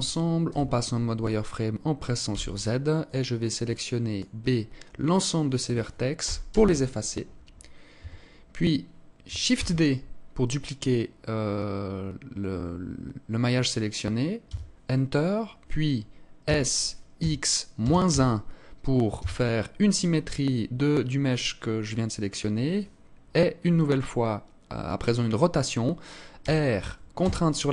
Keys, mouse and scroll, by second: 1.7 b, 5.6 Delete, 7.4 Tab, 9.0 shift+d, 15.8 s, 25.8 r.